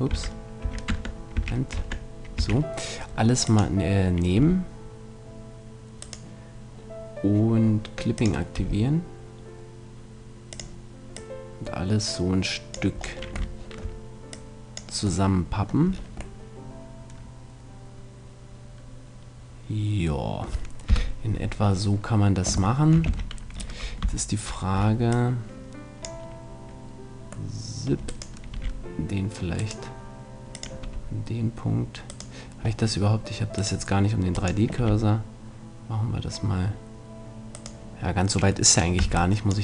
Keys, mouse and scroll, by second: 0.1 a, 0.6 a, 0.9 Tab, 1.4 a, 1.8 Tab, 2.4 a, 3.4-5.2 drag, 4.4 r, 5.2 click, 6.1-8.0 right drag, 8.2-9.8 drag, 8.6 r, 10.6-12.8 drag, 13.0-18.2 middle drag, 14.3-16.0 drag, 20.9 KP_7, 23.1 a, 24.0 c, 28.5 r, 29.7-31.6 right drag, 30.6-32.5 drag, 30.8 r, 31.6 middle click, 32.2-33.9 right drag, 33.6-35.1 drag, 34.8 r, 38.0-39.4 right drag, 39.0 c.